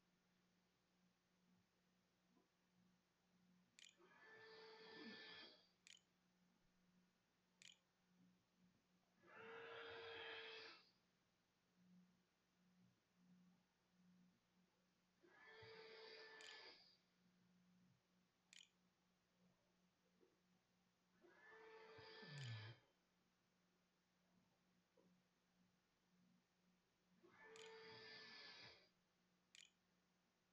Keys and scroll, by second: 1.0-2.1 typing, 3.6 BackSpace, 4.4 Delete, 4.7 Return, 5.3 Right, 6.1 Return, 6.3 ], 7.2 0, 8.3-9.2 typing, 16.5-22.2 typing, 29.3 ctrl+s, 29.8 a.